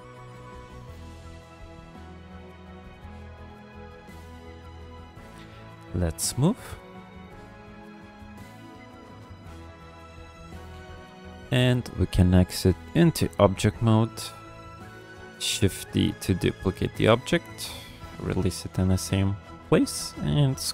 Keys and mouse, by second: 1.1 f, 1.7 click, 2.0-3.3 drag, 3.5 f, 4.0 click, 4.5 shift+click, 5.3 shift+click, 6.1 ctrl+click, 6.4 click, 7.0 shift+drag, 7.2 shift+drag, 7.5 click, 7.9 shift+click, 8.1 shift+click, 8.5 middle drag, 8.9 shift+click, 9.1 shift+click, 9.4 shift+click, 9.6 middle click, 10.9 KP_1, 12.3-12.9 drag, 15.5 shift+d, 19.1-20.4 drag.